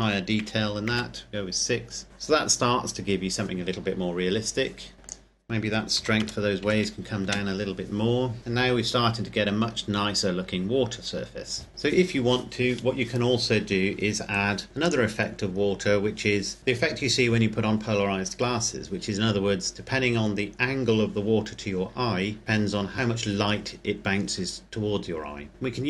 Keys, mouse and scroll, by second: 0.5 KP_6, 1.5 KP_Enter, 5.2 click, 6.1 KP_Decimal, 6.3 KP_0, 6.7 KP_5, 7.8 KP_Enter, 11.7 click, 14.9 click, 15.5-17.0 scroll down 1, 25.1-25.5 scroll up 1, 25.5 middle click.